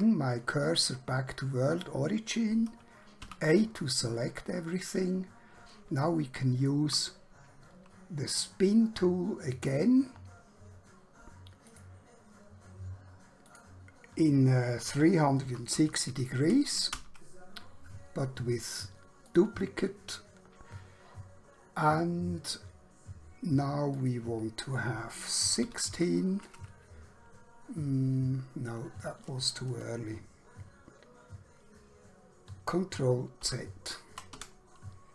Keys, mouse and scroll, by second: 0.6 click, 3.3 a, 5.3 scroll down 1, 6.1 shift+middle click, 9.5 click, 14.9-15.7 typing, 17.0 Return, 19.3 click, 24.0 click, 25.6-25.9 typing, 30.4 ctrl+Num_Lock, 33.4 ctrl+z, 34.4 Escape.